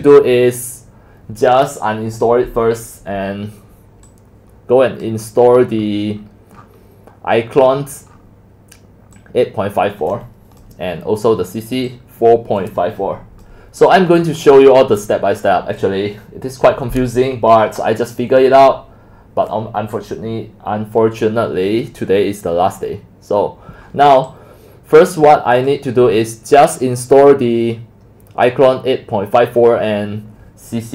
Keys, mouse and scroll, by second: 5.0 click, 5.5-6.6 scroll down 13, 6.6-7.6 scroll up 8, 7.6-8.1 scroll down 8, 8.1-10.6 scroll up 6, 10.6-11.2 drag, 14.2 click, 14.2-14.9 scroll down 7, 14.9-15.2 scroll up 5, 15.2-16.4 scroll down 4, 16.4-18.3 scroll down 1, 18.3-19.0 scroll down 3, 19.0-22.5 middle drag, 22.5 scroll, 22.8 scroll down 3, 22.8 scroll, 23.1 scroll up 2, 24.7 scroll up 2, 25.1-25.6 scroll down 2, 25.6-30.8 drag.